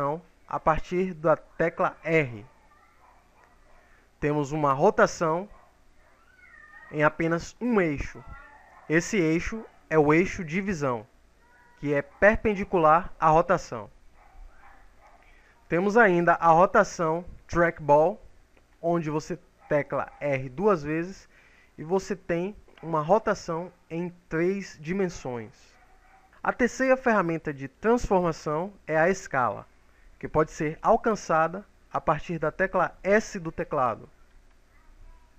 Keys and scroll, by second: 1.6 r, 20.6 r, 33.0 s.